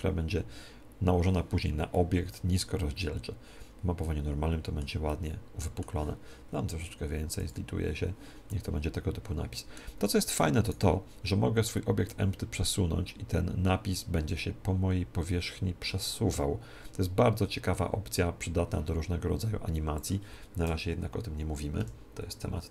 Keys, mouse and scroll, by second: 1.8-3.6 middle drag, 5.0-7.3 middle drag, 7.3-9.2 drag, 8.4-10.2 middle drag, 10.6-12.5 right drag, 12.0-13.8 drag, 20.5 KP_1, 21.7 KP_7, 22.6 KP_7.